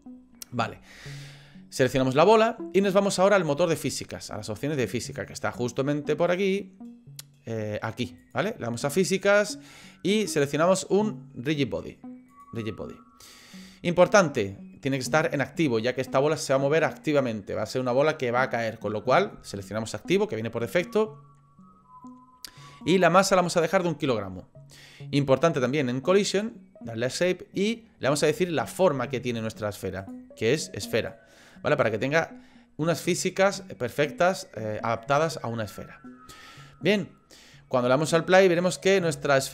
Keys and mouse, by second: 2.0 click, 8.2 click, 30.0-31.1 drag, 31.9-35.0 middle drag, 38.6 click, 39.4-39.5 shift+middle drag.